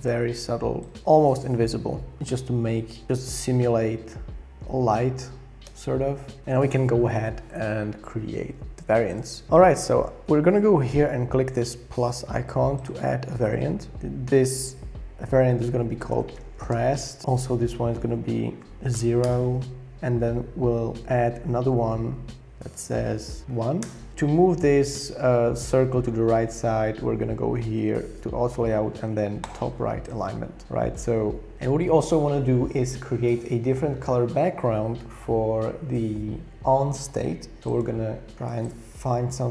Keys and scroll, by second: 2.2 shift+Down, 2.3 shift+Down, 3.0 shift+Up, 3.0 Down, 3.2 Down, 4.6 Down, 5.7 Return, 15.6-17.2 typing, 18.9 0, 19.2 Return, 23.4 1, 23.8 Return.